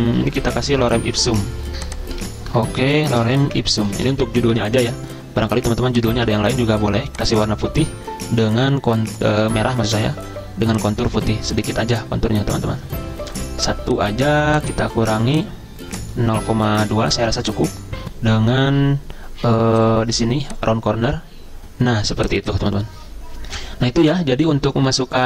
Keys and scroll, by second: 2.3 ctrl+a, 2.6-4.7 typing, 17.0 2.